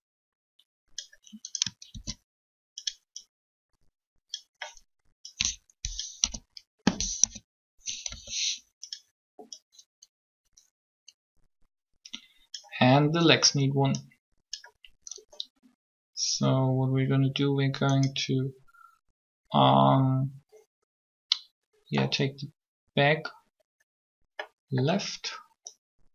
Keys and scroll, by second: 1.9 shift+d, 6.0 1, 7.2 3, 8.1 r.